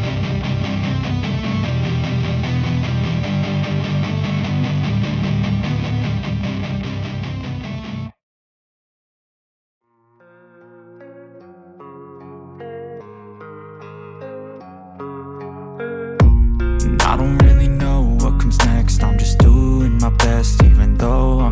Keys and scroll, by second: 8.5 Return, 16.7 space, 16.7 =.